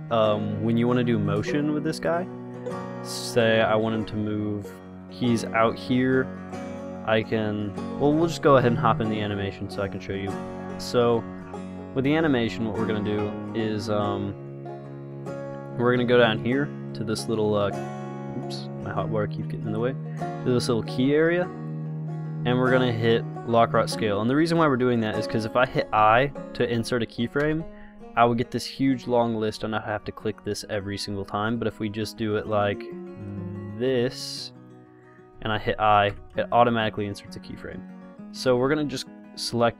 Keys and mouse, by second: 4.0-5.7 drag, 9.6 middle click, 10.6 KP_0, 21.9-23.9 drag, 27.6 i, 33.1-35.0 drag, 36.3 i, 38.3 a, 38.8 b.